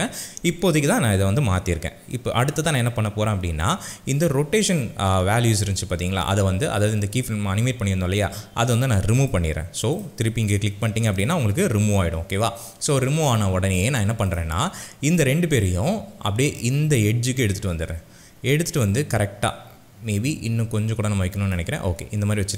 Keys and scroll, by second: 4.3 r.